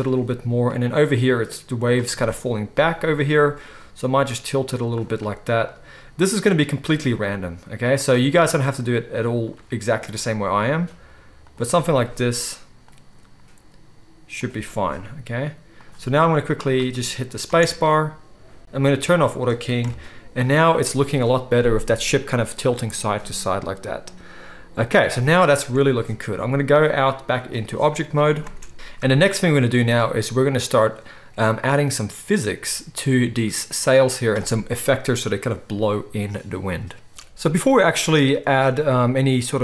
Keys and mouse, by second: 0.1-0.7 right drag, 0.7-4.9 middle drag, 1.5 click, 1.5 right click, 4.9 click, 5.7-8.0 middle drag, 8.0-8.6 right drag, 8.6-11.7 middle drag, 11.7-12.9 right drag, 12.9-20.0 middle drag, 13.0-16.1 drag, 13.0-18.2 right drag, 20.0 click, 20.2 middle click, 20.3 click, 20.5 right click, 23.4 click, 24.0-28.4 right drag, 26.8-28.4 drag, 26.8-37.1 middle drag, 37.1-39.6 drag.